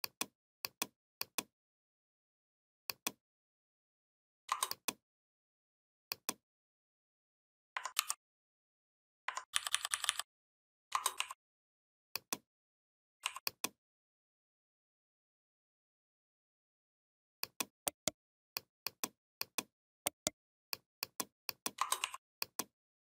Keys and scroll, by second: 7.8 ctrl+g, 9.3 ctrl+[.